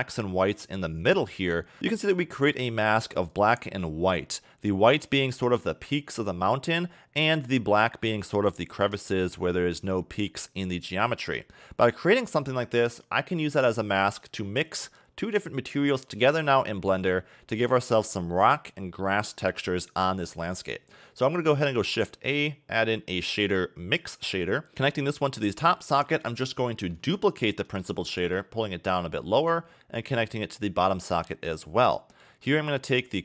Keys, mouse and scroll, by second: 1.3 click, 3.3 click, 13.2-13.7 scroll down 7, 13.7 middle click, 15.9 click, 20.5 middle click, 21.7 shift+a, 24.7 click, 24.9 click, 26.3 click, 26.7 middle click, 27.7 shift+d, 30.1 click, 32.1 middle click, 32.7-33.2 scroll down 1.